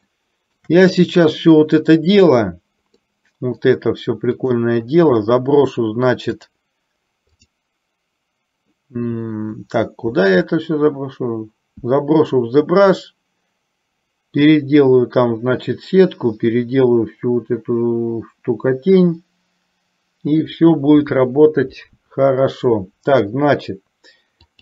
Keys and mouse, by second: 0.4 shift+middle click, 3.1-3.9 middle drag, 4.6 click, 7.4 click.